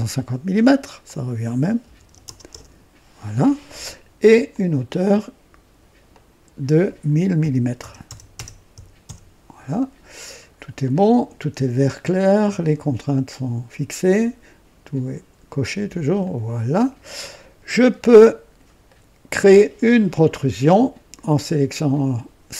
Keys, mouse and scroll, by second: 1.0 click, 1.8-2.5 typing, 2.5 KP_Enter, 4.4 click, 6.0 click, 6.2-9.0 typing, 9.0 KP_Enter, 10.2-10.5 scroll down 1, 10.8-11.3 right drag, 11.2 typing, 16.1 click, 17.9-18.7 drag, 18.8 right click.